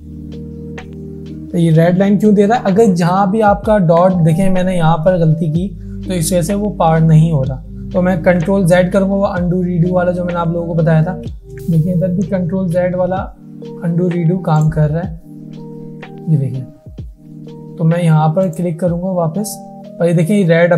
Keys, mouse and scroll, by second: 1.8 alt+scroll up 1, 7.4-8.2 alt+scroll up 1, 8.8 ctrl+z, 10.3 ctrl+z, 11.4 ctrl+shift+z, 11.6 click, 14.6 click, 15.7 ctrl+z, 18.5 click, 18.5 click.